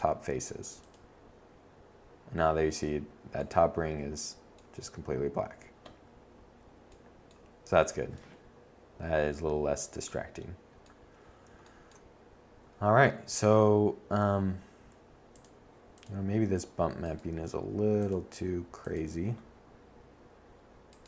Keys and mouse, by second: 7.2 middle click, 8.6 middle click, 12.7-14.0 drag, 14.0 Tab, 15.4 click.